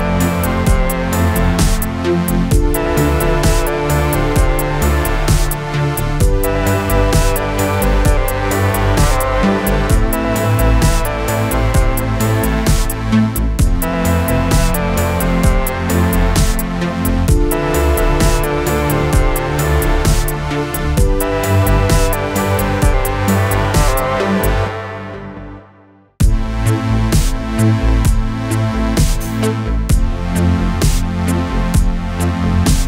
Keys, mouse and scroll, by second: 0.4 click, 1.3 ctrl+d, 2.2 p, 2.8 click, 5.1 Down, 6.3 click, 7.5 ctrl+d, 8.9 click, 10.1 p, 10.7 click, 13.2 click, 13.7 ctrl+d, 14.5 click, 17.2 Up, 19.8 click, 24.3 click, 24.9 u, 26.1-27.9 click, 31.5-32.6 click.